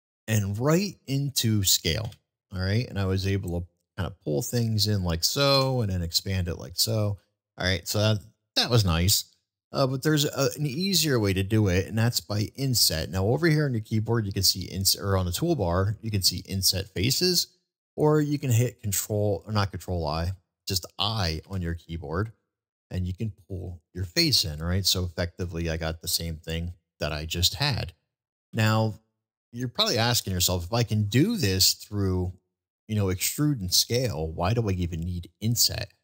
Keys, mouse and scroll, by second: 6.1 click, 6.1 e, 6.6-7.5 middle drag, 7.9 middle click, 10.4 ctrl+z, 11.2 ctrl+z, 20.4-20.9 middle drag, 25.9 click, 25.9 e, 26.4-27.3 middle drag, 28.1 ctrl+z, 28.8 ctrl+z, 29.4-29.9 middle drag, 30.8 middle drag.